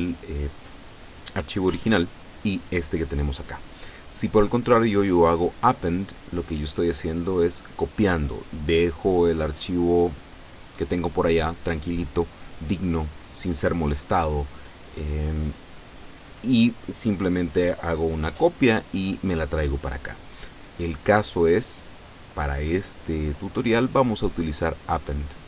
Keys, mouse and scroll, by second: 4.4 click, 21.7 click.